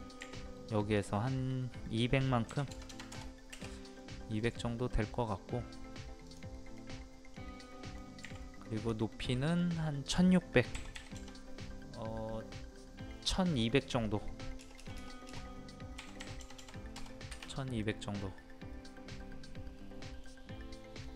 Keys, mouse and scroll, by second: 0.1-0.5 scroll up 1, 0.9 click, 2.4 KP_2, 3.9 middle click, 6.2 click, 6.7 middle click, 8.2 middle click, 8.7 click, 10.7 KP_1, 14.5 BackSpace, 15.9 KP_1, 17.8-20.5 middle drag.